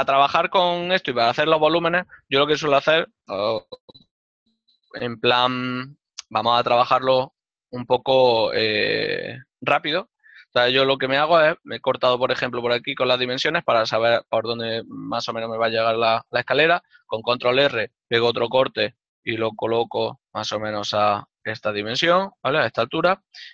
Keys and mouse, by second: 22.0 shift+click.